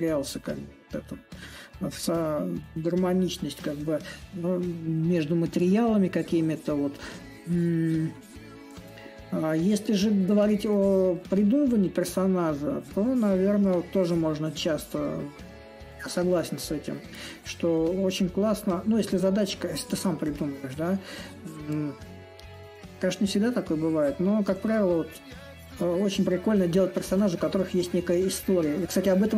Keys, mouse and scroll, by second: 0.0-5.0 drag, 6.5-11.5 drag, 14.5-19.5 drag, 20.0-25.0 drag, 25.5-29.3 drag.